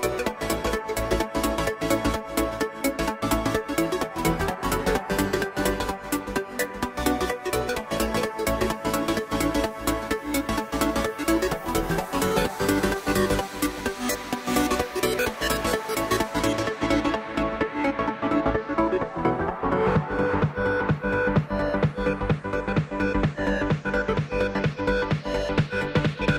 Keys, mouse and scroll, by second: 3.7 click, 6.8-10.5 drag, 10.5-11.6 scroll down 4, 11.6-13.4 drag, 13.4 scroll up 1, 13.7-16.2 shift+middle drag, 22.0 click, 25.5 click.